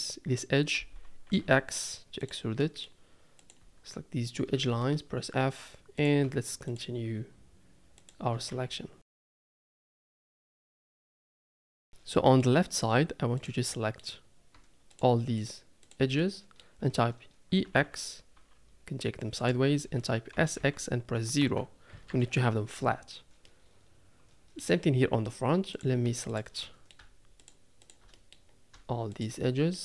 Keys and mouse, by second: 1.3 e, 2.6 click, 4.2 shift+click, 4.5 f, 4.8 middle click, 5.9 click, 6.7 shift+click, 8.0 shift+click, 8.5-11.4 typing, 9.1 click, 9.3 shift+click, 9.5 shift+middle click, 9.8 click, 9.9 shift+click, 10.1 middle click, 10.5 click, 12.1 middle click, 13.4 click, 13.6 middle click, 16.3 middle click, 16.4 click, 17.7 e, 20.3 s, 23.4 middle click, 23.9 middle click, 24.4 middle click, 29.1 shift+click, 29.7 click.